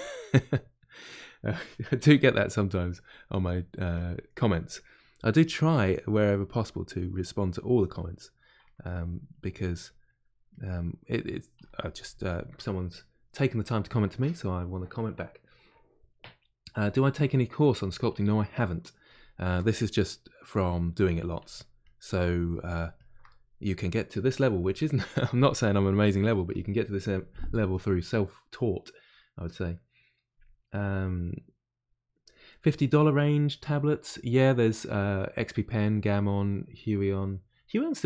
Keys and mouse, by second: 2.1 f, 4.5 click, 4.9 middle click, 5.4 click, 5.8 middle click, 6.4 click, 6.9 middle click, 7.7 click, 8.1 middle click, 8.6 ctrl+click, 9.0 middle click, 9.6 click, 10.0 middle click, 10.5 click, 10.9 middle click, 11.6-18.1 shift+drag, 18.1-21.5 middle drag, 21.5-23.2 shift+drag, 23.2-38.0 middle drag.